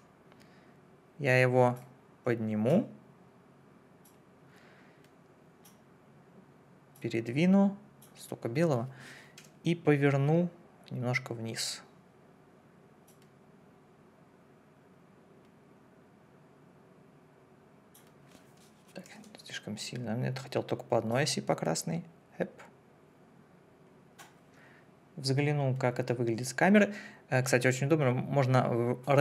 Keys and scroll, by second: 9.4 r, 19.1 ctrl+z.